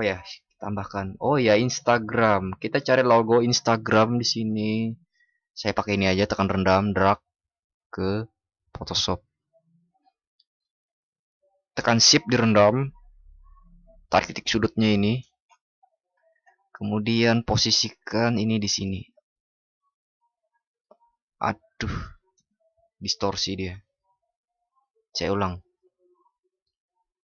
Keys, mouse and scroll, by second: 23.9 ctrl+shift+y.